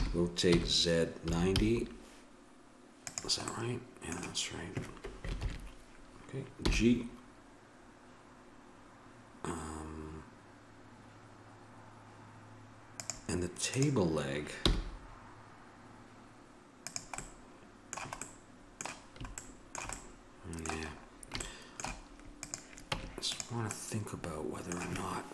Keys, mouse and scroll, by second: 5.4 ctrl+KP_7, 6.6 g, 13.8-15.5 drag, 14.6 g, 17.8-19.2 middle drag, 22.4-23.4 right drag, 22.9 Tab, 23.7 right click.